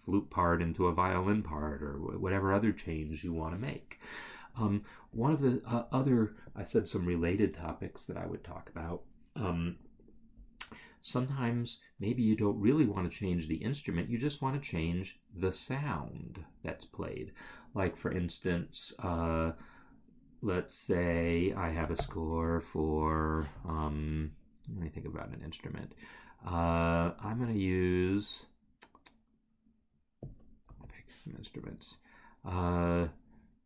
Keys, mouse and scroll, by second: 22.0 ctrl+n, 23.0 Return, 30.2 click.